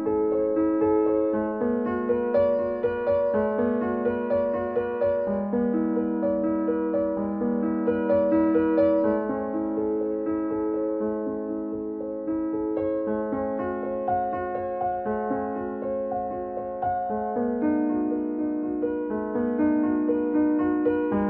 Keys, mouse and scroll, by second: 0.8 click, 1.8-4.9 middle drag, 4.9-6.3 scroll up 1, 6.3-7.0 scroll down 1, 7.0-11.9 middle drag, 12.8 click, 12.8 click, 15.4 scroll down 1, 15.7 scroll, 15.8-16.1 scroll up 1, 17.2-21.2 middle drag.